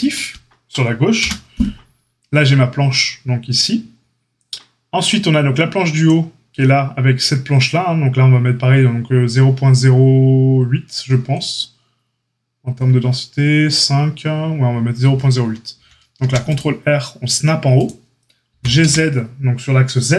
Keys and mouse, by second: 15.7 ctrl+r, 18.5 g.